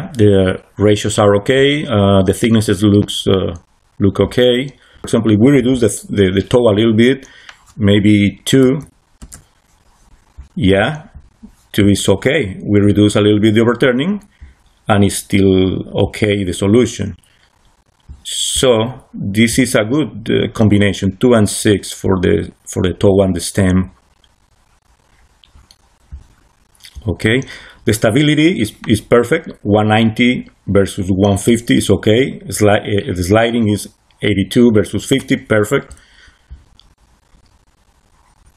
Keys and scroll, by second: 8.5 2, 9.1 Return.